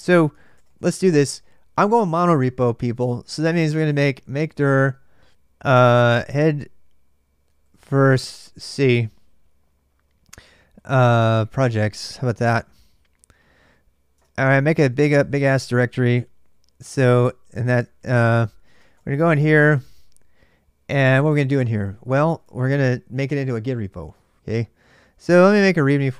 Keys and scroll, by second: 0.0-1.1 typing, 3.8-9.1 typing, 10.5-12.4 typing, 13.7-19.1 typing, 17.0 Tab, 17.8 Tab, 22.1 typing, 22.2 Return, 24.9-26.1 typing.